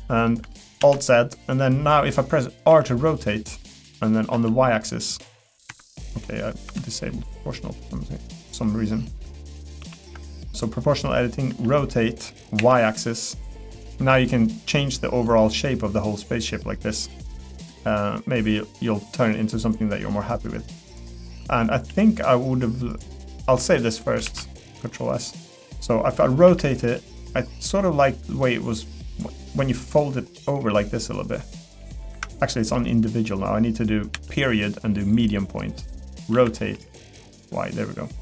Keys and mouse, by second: 0.8 alt+z, 1.1 middle click, 2.7 r, 6.7 o, 9.8 alt+o, 11.5 r, 21.1 middle click, 21.9 g, 23.1 middle click, 24.3 ctrl+s, 24.6 middle click, 25.9 middle click, 26.4 r, 36.3 r.